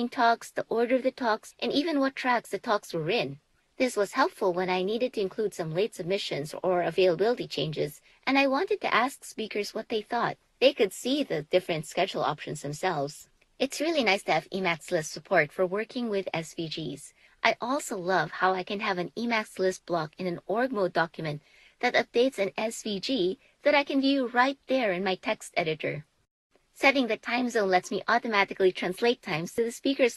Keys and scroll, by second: 0.3 super+s, 4.5 BackSpace, 5.5 2, 6.6 3, 8.4 Up, 9.3 5, 10.5 0, 12.9 super+s, 17.1 BackSpace, 18.1 2, 19.1 3, 20.9 Up, 21.9 5, 24.9 0.